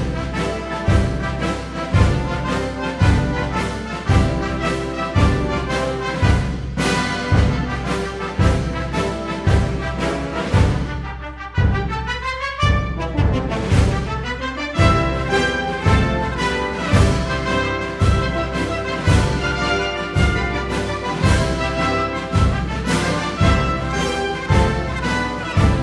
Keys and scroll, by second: 13.1 Down, 18.9 super+d.